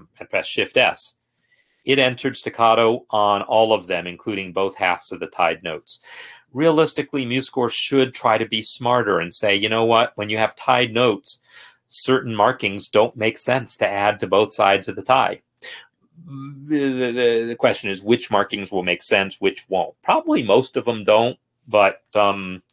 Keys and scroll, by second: 0.9 shift+s.